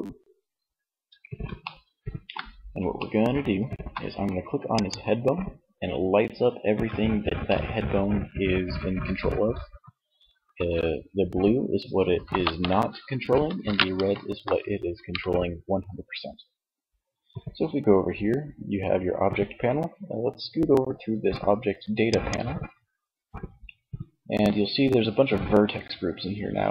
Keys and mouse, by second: 21.2-22.8 drag.